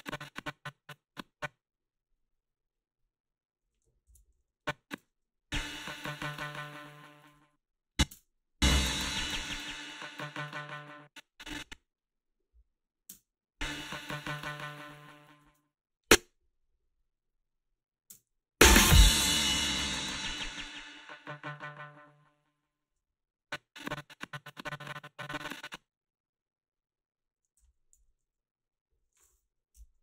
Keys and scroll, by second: 4.0 ctrl+b, 5.0 space, 7.2 space, 8.1 space, 10.7 space, 13.1 space, 15.4 space, 18.1 space, 22.8 space, 27.6 h, 29.7 Delete.